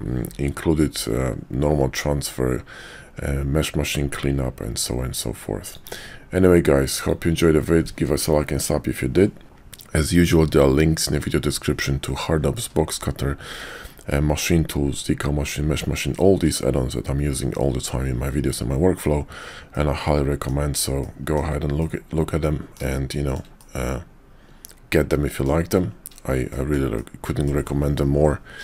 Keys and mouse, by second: 5.7 click, 19.7-20.5 middle drag, 20.9-21.4 shift+middle drag, 21.8-22.8 middle drag, 23.0 shift+middle drag, 23.6-25.4 middle drag, 26.5 shift+middle drag, 26.9-27.5 middle drag.